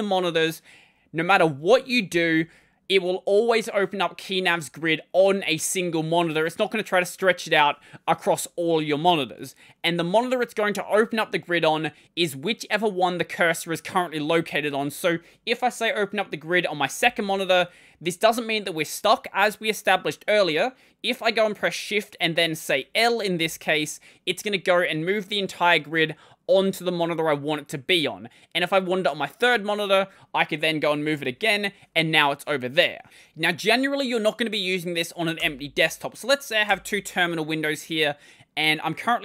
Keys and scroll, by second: 1.9 ctrl+;, 14.5 Escape, 16.8 ctrl+;, 23.2 l, 31.1 l, 35.2 super+Return, 36.5 super+Return.